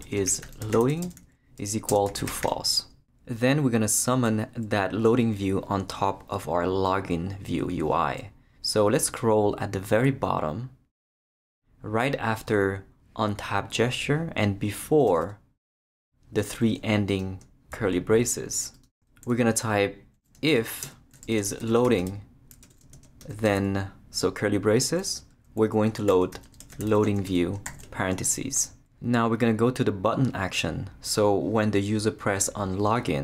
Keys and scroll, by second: 0.0-2.9 typing, 15.1 Return, 20.5-23.2 typing, 22.6 Return, 23.4 shift+Return, 24.4 Return, 25.8-28.2 typing.